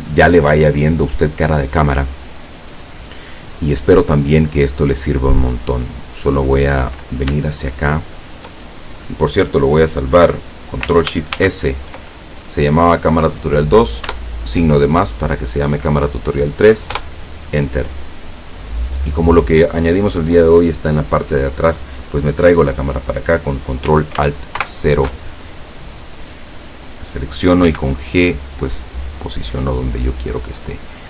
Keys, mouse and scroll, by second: 2.7-6.2 middle drag, 6.5 scroll up 2, 7.5-8.5 shift+middle drag, 11.4 ctrl+shift+s, 14.1 KP_Add, 17.0 KP_Enter, 24.7 ctrl+alt+KP_0, 26.6 right click, 27.7 g.